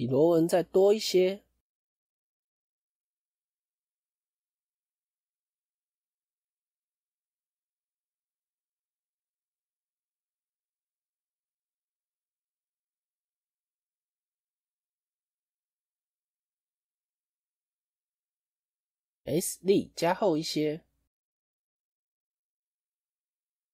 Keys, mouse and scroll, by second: 2.0 s, 7.2-8.1 scroll down 5, 7.7 shift+middle click, 8.9 click, 9.1 middle click, 9.9 alt+click, 10.5 click, 11.0 alt+click, 11.7 alt+shift+click, 12.1 middle click, 12.7-13.8 scroll up 1, 13.8 alt+shift+click, 14.2 scroll up 1, 14.2 middle click, 15.1 alt+shift+click, 16.8 KP_1.